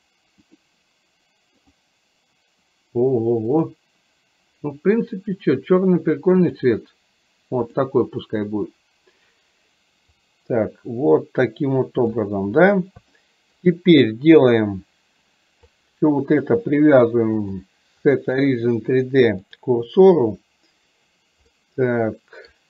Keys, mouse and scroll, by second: 0.5-1.9 drag, 3.7-6.7 drag, 7.8 drag, 10.3-12.3 drag, 13.3 shift+middle click, 15.8 click, 17.4-19.7 drag, 21.7-22.5 middle drag.